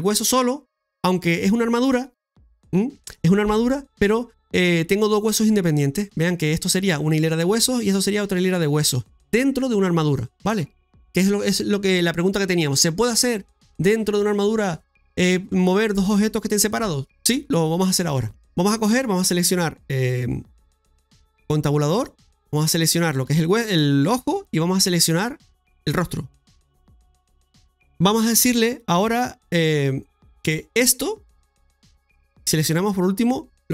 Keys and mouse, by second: 4.1 middle click, 18.7 middle click, 20.9 Tab, 22.5 click, 23.5 right click, 25.1 middle click, 32.2 shift+right click.